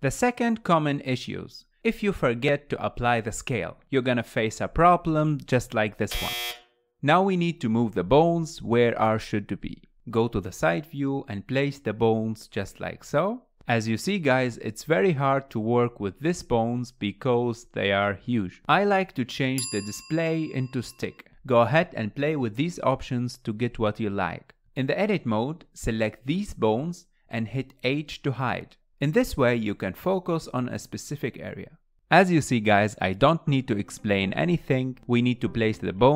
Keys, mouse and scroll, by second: 0.3 shift+middle click, 0.8-2.6 scroll up 7, 2.6 click, 3.8 g, 5.3 shift+middle click, 5.9 click, 7.0 g, 7.9 shift+middle click, 8.7 click, 9.3 g, 10.1 KP_3, 11.0 g, 13.0 alt+z, 13.3-13.7 scroll up 1, 13.7 shift+middle click, 14.5-15.3 scroll down 5, 15.3-18.3 middle drag, 18.8-24.3 drag, 24.3 middle click, 24.9-25.4 scroll down 1, 25.4 KP_1, 26.0 click, 27.5 h, 28.0-28.6 scroll up 5, 30.3 shift+click, 30.8 shift+click, 32.2-36.1 typing, 32.8 scroll up 3, 32.9 shift+middle click, 33.1 shift+middle click, 33.3 click, 34.6 click, 35.4 click.